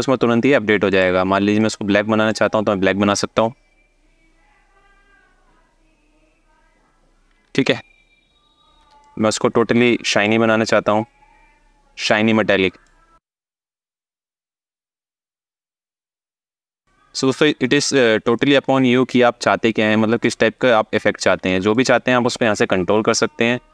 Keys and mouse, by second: 0.6 click, 8.7-9.9 drag, 11.8 click, 14.2 alt+middle click, 15.6-16.5 alt+middle drag, 18.1 click, 19.9 click, 21.2 alt+shift+click, 21.3 alt+shift+middle click, 22.8 alt+shift+middle click.